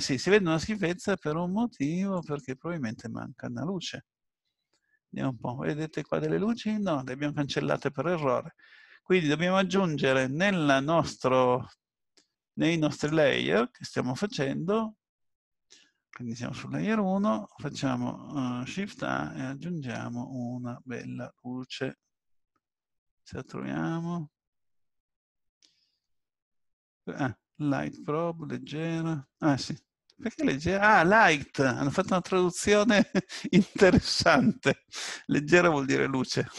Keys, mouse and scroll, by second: 0.0-2.1 scroll up 2, 2.1 click, 12.9 click, 18.9 shift+a.